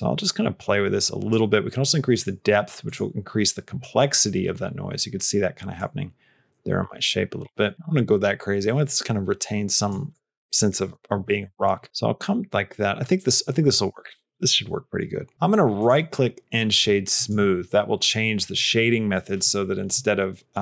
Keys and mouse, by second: 2.0 click, 2.7 click, 5.7-9.9 drag, 15.9-17.1 right drag.